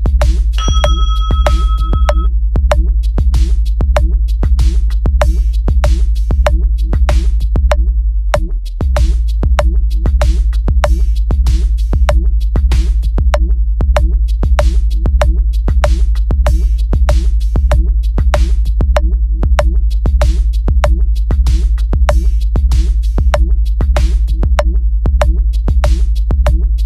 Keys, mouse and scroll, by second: 0.8 click, 1.3 click, 2.2 click, 3.0 click, 3.8 click, 7.4 click, 8.0 click, 8.5 click, 9.0 click, 9.7 click, 10.5 click, 11.5 click, 12.2 click, 12.6 click, 14.0 click, 14.7 click, 15.4 click, 17.1 click, 17.5 click, 17.8-18.5 drag, 20.3 click, 21.0 click, 22.2 click, 22.9 click, 23.5 click, 24.0 click, 26.5 click.